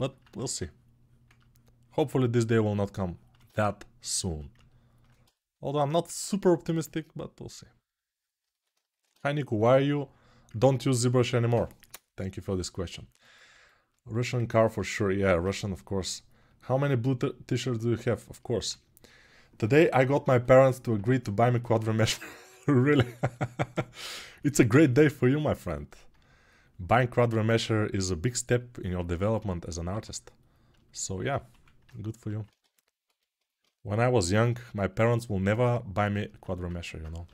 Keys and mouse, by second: 0.1 1, 37.0 g.